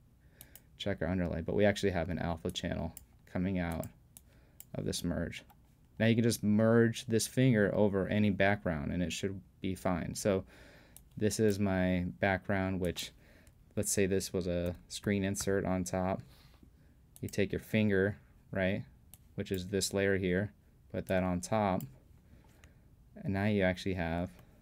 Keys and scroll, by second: 14.3 super+p.